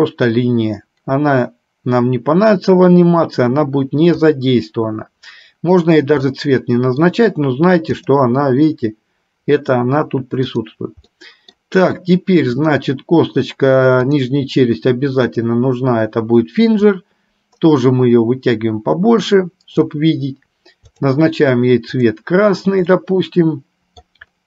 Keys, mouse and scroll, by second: 6.5 middle click, 8.1 click, 10.5 click, 11.2 middle click, 12.6-14.5 drag, 17.0-20.1 drag, 23.1-24.4 middle drag.